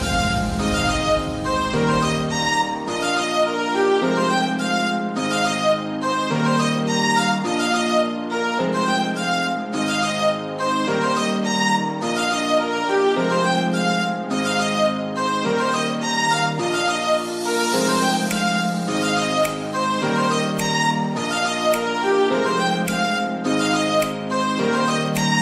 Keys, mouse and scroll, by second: 0.0 shift+middle click, 0.7 shift+middle click, 1.5 g, 2.4 r, 3.5 click, 3.6 g, 5.1 scroll down 4, 5.4 middle click, 6.3 click, 6.7 g, 7.2 z, 7.7 click, 8.1 s, 9.3 click, 9.7 scroll down 2, 9.9-10.9 middle drag, 10.9 a, 11.2 g, 11.9 click, 13.1 KP_1, 13.7 g, 14.5 click, 14.8-15.1 scroll down 5, 15.1 middle click, 15.6-15.9 scroll up 3, 15.9 shift+a, 17.4 click, 17.5 shift+a, 17.8 s, 19.4-20.3 scroll down 1, 20.3-20.7 scroll down 1, 20.7 s, 21.4 scroll down 3, 21.6 middle click, 22.4-23.0 scroll up 2, 23.0 middle click, 23.4 Tab, 23.8 2, 24.0 click, 24.4 shift+click, 25.1 shift+click.